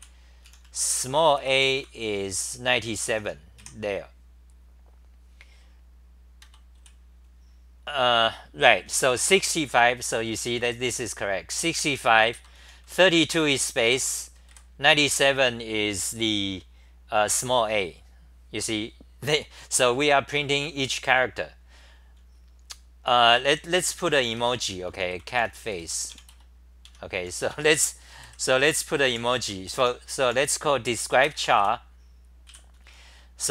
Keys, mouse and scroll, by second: 0.0-1.4 typing, 2.4 w, 3.1 t, 3.6 2, 5.6 typing, 6.4 ctrl+g, 6.8 w, 9.0 h, 9.3 n, 10.1 super+=, 11.5 1, 12.3 ctrl+g, 12.6 n, 12.8 1, 13.9 ctrl+g, 14.1 n, 14.5 1, 23.3-24.9 typing, 26.9 Home, 26.9-30.2 typing, 32.2-33.5 typing.